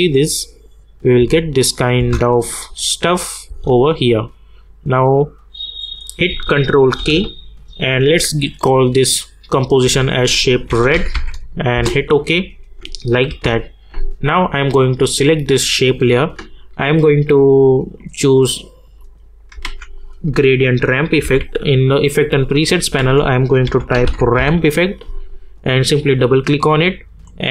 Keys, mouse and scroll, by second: 1.7 click, 2.0 space, 4.1-5.8 drag, 7.0 ctrl+k, 8.9 click, 9.8-11.6 typing, 11.7 Return, 13.3 k, 14.7 click, 18.0 click, 19.6 ctrl+a, 21.2 g, 22.9 ctrl+a, 23.4-24.8 typing, 25.8 click.